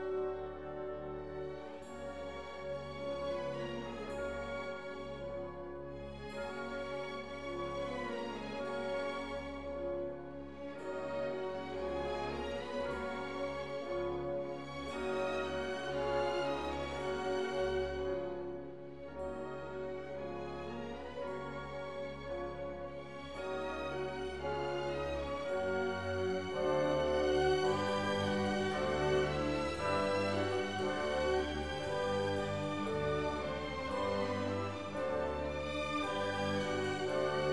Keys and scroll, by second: 2.3 4, 2.4 0, 2.6 Return, 3.4 4, 3.6 0, 4.0 Return, 11.0 Left, 11.4 BackSpace, 11.9 Return, 17.0 BackSpace, 17.1 2, 17.5 Return, 25.9 c, 26.9 c, 28.1 ctrl+s.